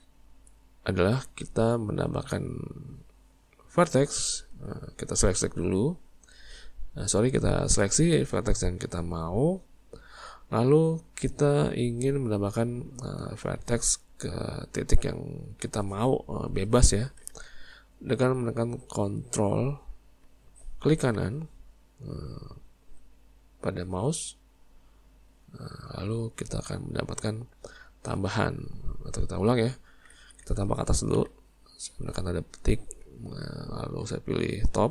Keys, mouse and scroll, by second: 1.1-4.1 middle drag, 4.6 Tab, 9.4 click, 10.0-16.3 middle drag, 24.3 ctrl+right click, 26.0-29.5 middle drag, 29.5 ctrl+z, 30.2 ctrl+z, 31.2 `, 34.1 `.